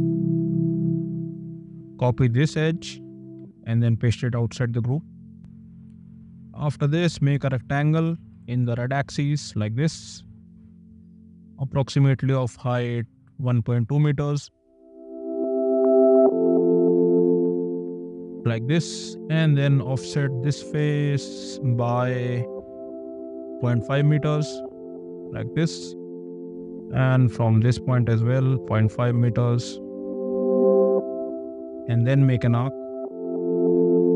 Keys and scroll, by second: 3.2 ctrl+c, 3.3 Escape, 6.9 r, 8.3 Right, 15.1 ,, 16.4 KP_1, 16.7 ., 16.9 KP_2, 17.5 Return, 19.0 space, 20.6 m, 23.5 5, 23.8 Return, 26.6 space, 28.0 m, 30.3 ., 30.6 5, 30.8 Return, 31.3 space, 31.9 a.